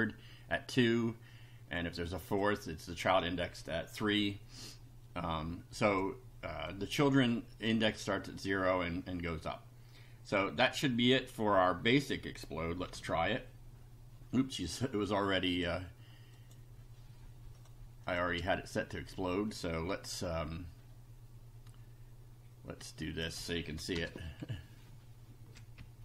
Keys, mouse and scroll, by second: 2.1 click, 5.8 click, 6.7-7.8 drag, 12.9 F5, 14.5 click, 15.6 click, 16.4 click, 17.6 click, 18.0 click, 18.5 space, 22.8 click, 24.0 BackSpace, 24.4 Down, 25.8 Up.